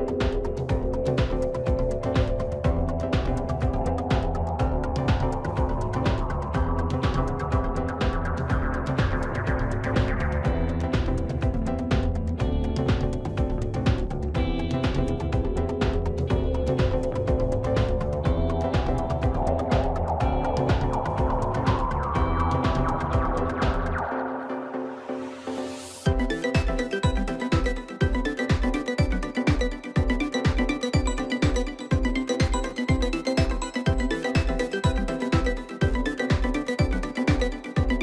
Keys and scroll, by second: 26.2 ctrl+t.